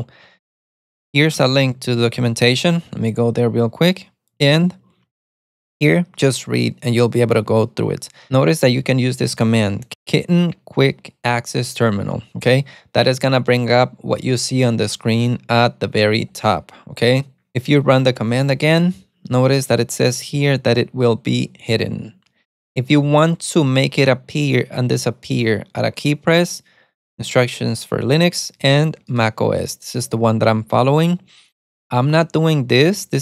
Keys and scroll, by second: 0.0-2.3 typing.